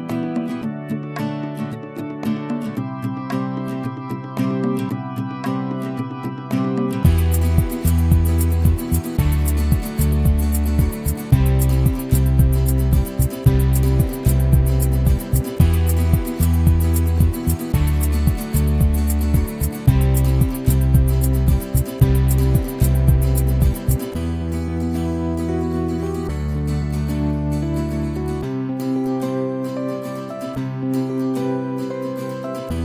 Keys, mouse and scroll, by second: 1.0 click, 1.5-9.1 drag, 9.9 ctrl+z, 10.2 click, 10.5 ctrl+z, 10.9 right click, 11.2 click, 11.5 ctrl+z, 11.6 ctrl+click, 11.9 ctrl+z, 12.0-22.5 alt+drag, 22.5 middle click, 22.6 f, 22.8-24.0 alt+drag, 24.0 scroll up 2, 24.2 alt+click, 24.7 ctrl+z, 24.9 alt+click, 25.1 scroll down 4, 25.2-26.5 alt+drag, 26.5 right click, 26.7 alt+click, 27.2 f, 27.6 scroll up 1, 27.7-31.5 right drag, 31.5-32.6 drag, 32.6 ctrl+z.